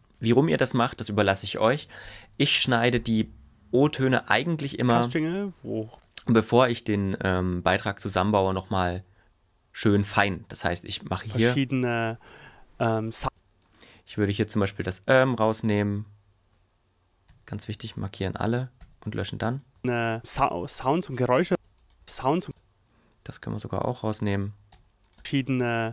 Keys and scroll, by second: 4.7 space, 11.1 space, 13.2 space, 17.3 a, 19.7 space, 21.5 space, 25.1 space.